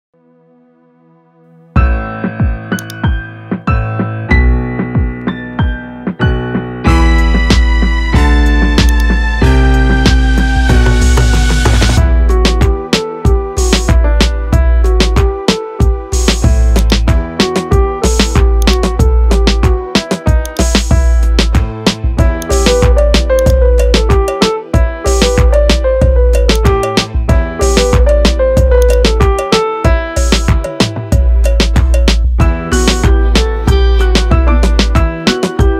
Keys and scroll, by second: 0.7 shift+a, 4.9 Tab, 6.7 alt+s, 11.4 F3, 13.8 n, 32.7 e, 34.7 alt+s.